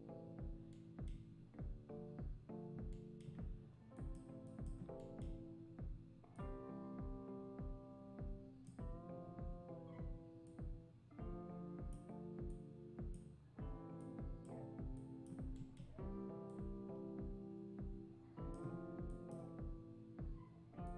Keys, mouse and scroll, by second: 3.9-8.6 drag, 10.5-15.7 drag, 16.5 click, 19.1 click, 20.8-20.9 drag.